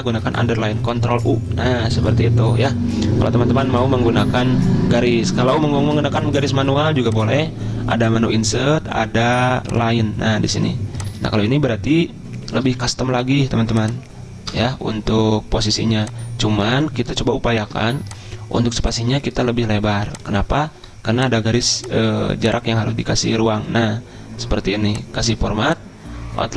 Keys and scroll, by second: 0.6 ctrl+u, 14.5 BackSpace.